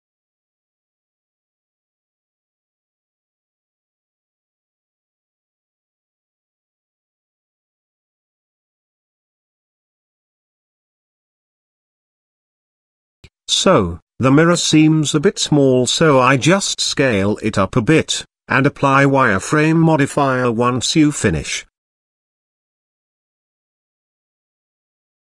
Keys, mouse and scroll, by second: 0.7 Tab, 1.2-3.2 middle drag, 3.5-4.0 shift+middle drag, 4.3 middle click, 5.4 KP_0, 7.3 click, 8.4 click, 9.2 click, 12.6 click, 13.1 shift+click, 14.8 shift+click, 15.6 s, 18.1 g, 21.9 click, 22.8 ctrl+z, 23.4 middle click, 24.1 KP_Decimal, 25.0-25.2 middle drag.